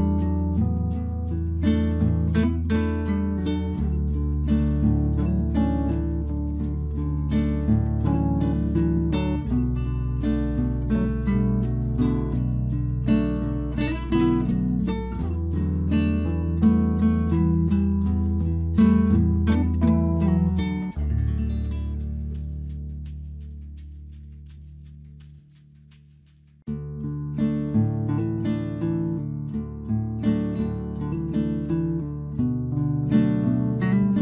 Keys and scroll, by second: 11.4 Return, 21.0 Return, 32.9 ctrl+j, 33.9 ctrl+t.